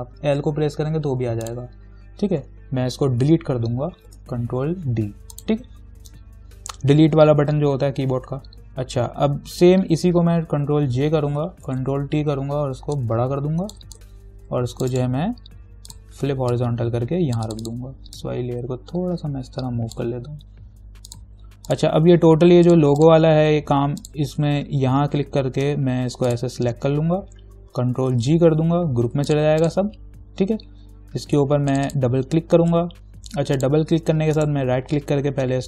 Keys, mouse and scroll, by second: 1.7 click, 4.3 ctrl+d, 5.6 click, 10.9 ctrl+j, 13.2-15.2 alt+drag, 15.2 right click, 16.1-21.3 drag, 25.0-25.9 scroll down 1, 26.5 shift+click, 28.4 ctrl+g, 29.5 click, 34.6 right click.